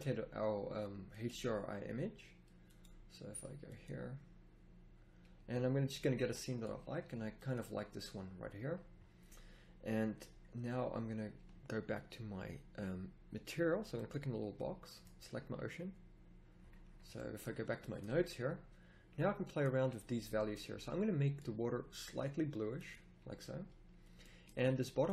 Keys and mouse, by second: 5.4 right click, 5.7-6.9 middle drag, 7.1 middle click, 14.5-18.4 middle drag.